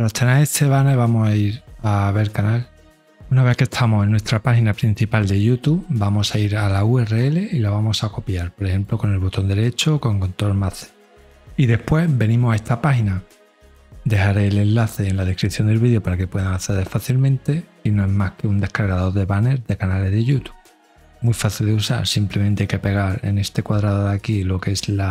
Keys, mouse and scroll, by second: 1.6 click, 4.8 click, 6.7 right click, 8.5 click, 23.8 ctrl+a, 25.0 click.